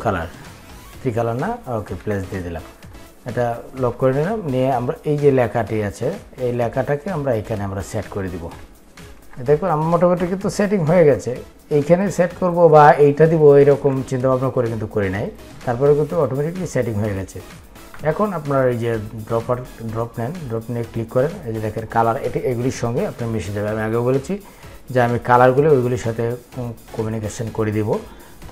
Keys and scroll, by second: 2.9 ctrl+2.